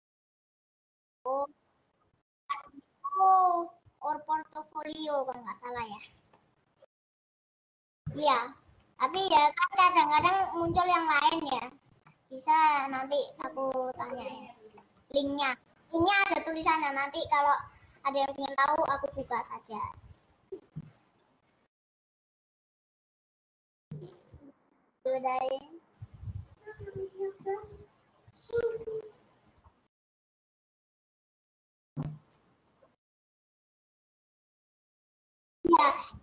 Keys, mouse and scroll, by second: 5.8-7.8 middle drag, 7.8-8.8 scroll down 1, 8.8-9.3 scroll up 1, 9.3-28.8 shift+middle drag, 29.7-36.1 middle drag.